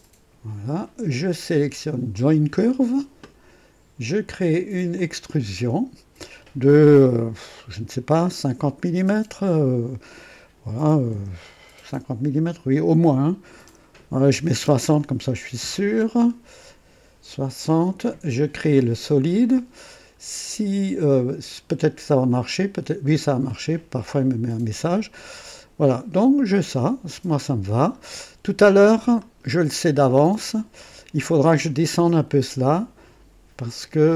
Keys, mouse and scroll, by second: 2.1 click, 4.9 click, 14.3 KP_6, 14.6 KP_0, 15.6 scroll down 1, 16.7 scroll up 1, 22.2 click, 25.1-28.0 drag, 29.1 click, 30.2-30.5 scroll up 1, 30.8-31.3 right drag.